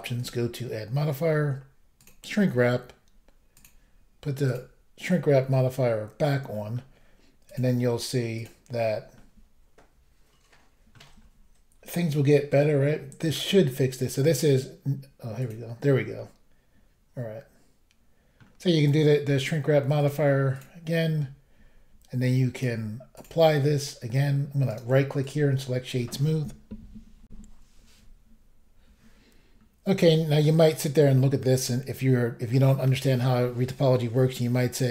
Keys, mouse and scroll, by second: 0.2 click, 0.2 click, 2.0 click, 2.0 click, 3.6 click, 4.4 click, 4.5 click, 4.5 click, 6.5 middle click, 7.5 click, 7.5 click, 8.4 click, 8.4 click, 9.1 middle click, 11.4 scroll up 2, 12.2 scroll down 1, 15.4 click, 15.5 click, 16.2 middle click, 20.0 click, 20.1 click, 20.5 click, 21.8 double click, 22.6 click, 23.2 click, 24.7 right click, 24.7 right click, 25.2 click, 25.3 double click, 27.3 Insert, 29.6-30.0 scroll down 1, 30.1 middle click, 31.1-31.6 scroll down 1, 31.6 middle click, 32.7-33.7 scroll up 1.